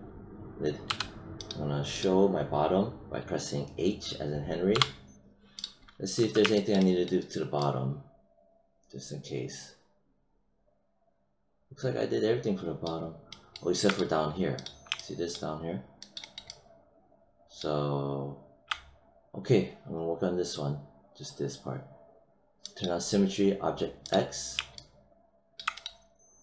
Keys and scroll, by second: 0.8 h, 4.6 h.